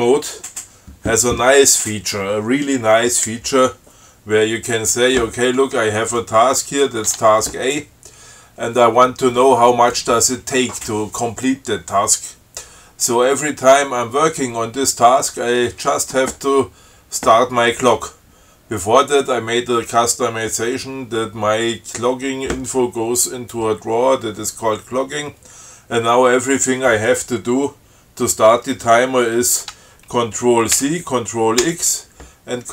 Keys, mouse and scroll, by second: 6.4 click, 7.4 Tab, 31.0 ctrl+c, 31.9 ctrl+x.